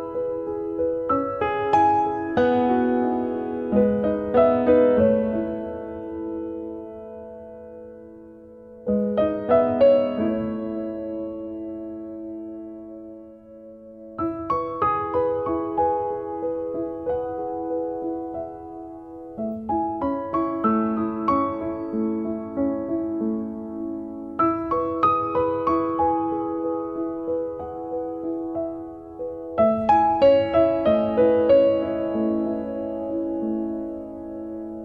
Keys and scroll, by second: 0.6 b, 9.3 b, 9.5 space, 13.1 m, 20.0 space.